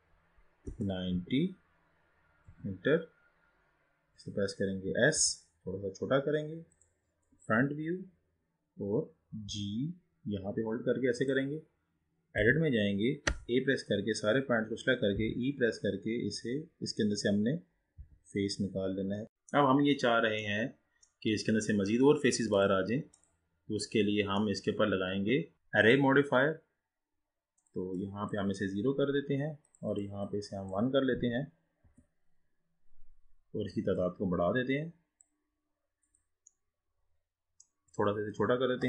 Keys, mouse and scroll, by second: 5.4 s, 7.4 KP_1, 8.1-8.8 scroll down 3, 8.8-9.7 scroll up 2, 9.7 g, 12.4 Tab, 13.4 a, 15.2 e, 19.2-19.8 scroll down 2, 19.8-20.5 scroll up 1, 20.5-22.7 middle drag, 22.7-24.0 drag, 24.0-24.6 scroll down 3, 24.6-25.6 middle drag, 26.0-27.5 drag, 27.7-33.0 drag, 34.1-36.3 drag, 36.6-38.8 middle drag.